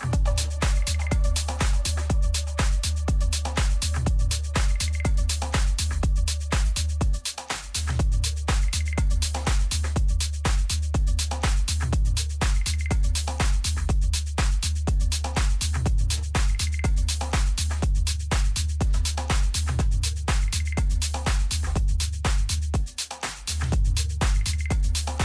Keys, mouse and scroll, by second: 0.4 a, 1.5 b, 2.8 g, 10.3 a, 11.4 b, 13.0 g, 15.5 a, 16.0-20.5 middle drag.